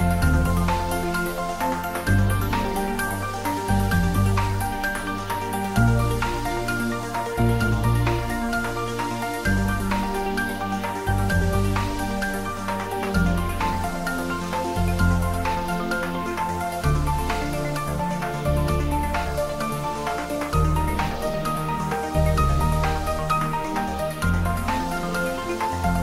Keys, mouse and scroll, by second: 4.4 Tab, 4.9-5.9 scroll down 1, 5.9-7.5 middle drag, 8.0-9.1 scroll up 1, 9.1 click, 9.6 Tab, 10.2 click, 11.6 `, 11.8 3, 12.6-15.2 scroll down 1, 15.2-16.4 middle drag, 16.6 scroll up 1, 17.4 click.